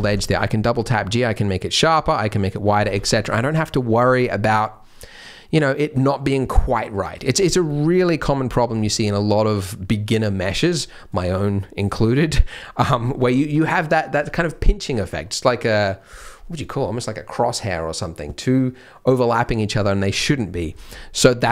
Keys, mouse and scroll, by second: 0.0-0.4 scroll down 3, 0.0 g, 3.2 scroll up 2, 3.4 Tab, 7.4 scroll down 2, 7.6 middle click, 7.9 scroll up 2, 8.3 middle click, 20.6-21.0 scroll up 2, 20.9 middle click.